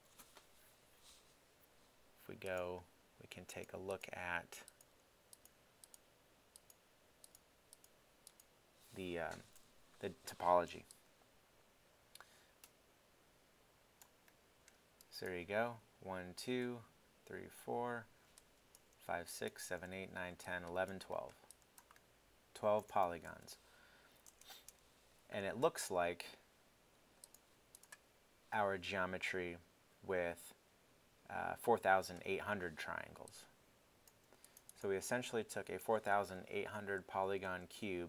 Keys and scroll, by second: 23.3 alt+super+Tab, 23.8 super+Tab.